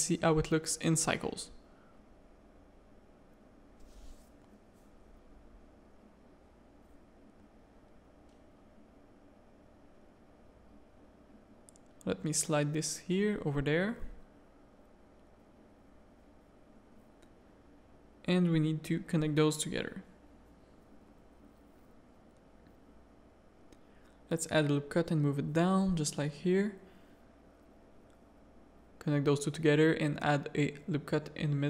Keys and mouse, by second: 0.5 middle click, 1.4 middle click, 2.8-6.2 middle drag, 8.1 z, 8.4 middle click, 8.8 Tab, 9.1 middle click, 9.5 shift+middle click, 10.0 z, 10.2 a, 11.2 g, 12.5 g, 13.1 a, 13.8 click, 14.0 g, 14.8 a, 15.3 click, 16.2 shift+click, 18.5 click, 19.2 shift+click, 19.5 f, 19.8 a, 20.0 middle click, 22.6 ctrl+r, 23.0 g, 24.1 g, 24.7 a, 24.9 ctrl+r, 26.1 a, 26.7 click, 28.5-31.6 typing, 28.9 ctrl+r.